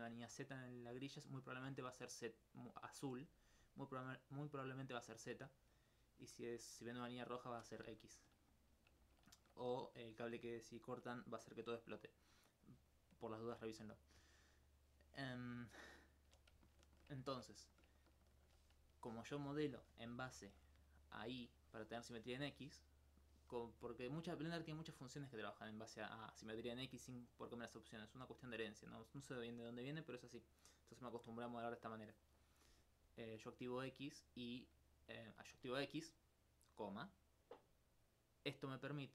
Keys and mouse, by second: 3.4 right click, 10.6 alt+click, 12.1 right click, 16.7 alt+click, 20.2 alt+click, 26.0-32.9 middle drag, 33.6 click.